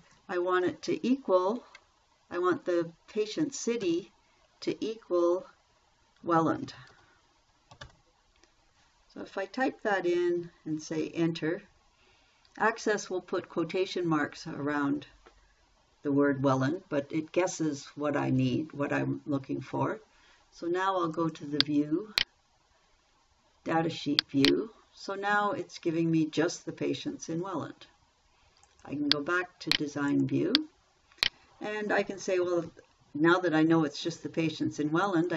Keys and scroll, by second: 4.2 =, 6.4-8.7 typing, 11.3 Return.